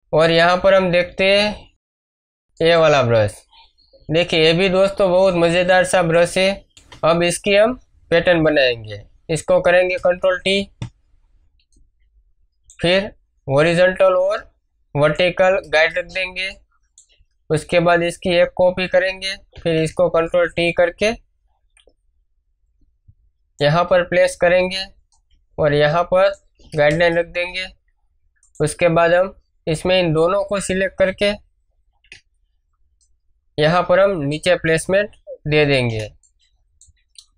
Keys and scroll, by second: 4.9 space, 9.9 ctrl+t, 15.6 Return, 16.1 space, 18.2 ctrl+j, 26.9 Return, 31.0 ctrl+j, 35.9 shift+space.